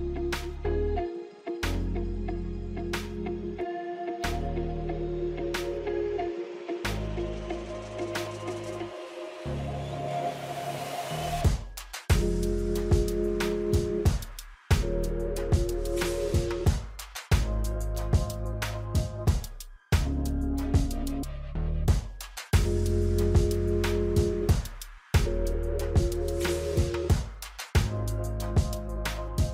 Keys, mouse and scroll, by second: 0.0 space, 0.4 space, 1.2-6.6 drag, 6.6 ctrl+d, 9.0 click, 9.4-10.9 scroll up 1, 11.4-18.8 drag, 19.6-20.0 scroll down 2, 22.4 scroll down 1, 23.4 scroll up 1.